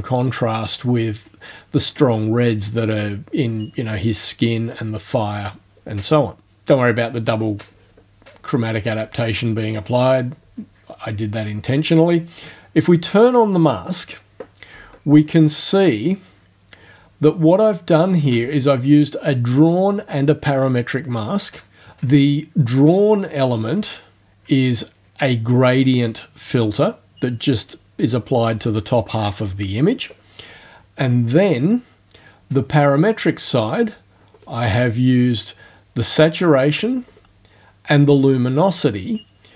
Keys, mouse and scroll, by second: 13.3 click, 16.0-16.5 ctrl+alt+scroll down 2, 16.7 ctrl+alt+scroll down 2, 17.7 ctrl+alt+scroll down 1, 24.3 click, 31.4 click, 32.9 click, 34.4 click, 37.1 click.